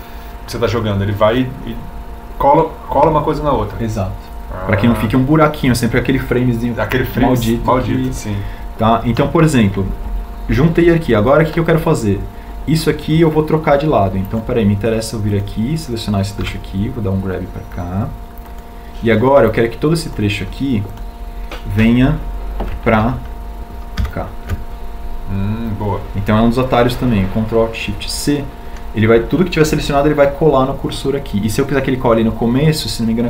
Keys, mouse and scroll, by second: 18.5 g, 26.2 ctrl+alt+shift+c.